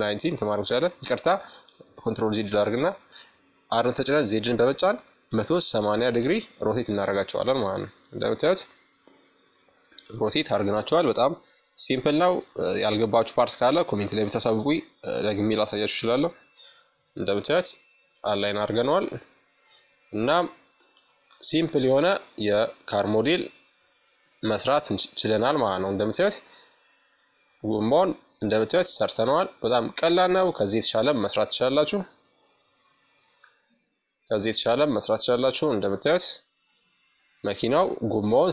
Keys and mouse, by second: 1.4 r, 8.1-14.0 drag, 14.5-16.8 drag, 16.8 middle click, 17.4 click, 17.5-18.6 right drag, 17.7-19.6 middle drag, 20.2-21.9 drag, 21.4 KP_Subtract, 23.0-27.1 middle drag, 28.8 middle click, 29.2-35.1 drag, 30.2 middle click, 31.7-35.5 middle drag.